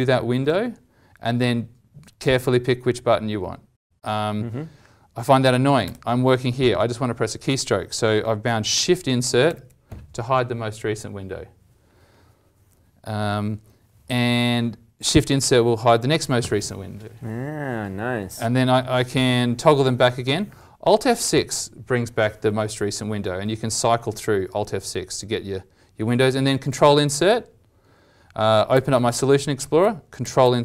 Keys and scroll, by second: 20.2 alt+F6, 22.4 alt+F6, 23.4 alt+F6, 24.1 alt+F6, 24.5 alt+F6, 26.7 ctrl+Insert, 28.7 ctrl+alt+l, 30.2 ctrl+Insert.